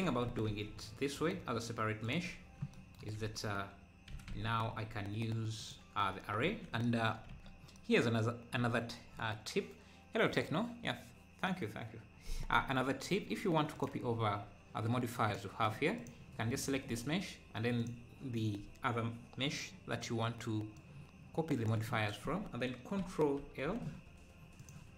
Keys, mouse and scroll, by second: 0.3 s, 2.3 `, 2.8 scroll, 3.2 `, 4.1 g, 7.3 ctrl+s, 13.7 click, 15.3-20.9 drag.